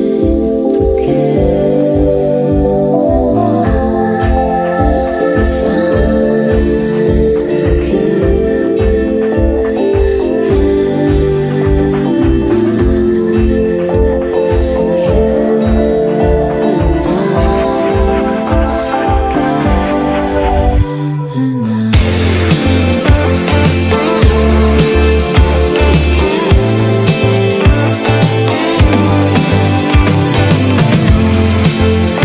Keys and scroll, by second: 14.2 ctrl+z, 18.1 ctrl+z, 20.8 ctrl+z, 21.1 ctrl+z, 21.9 space.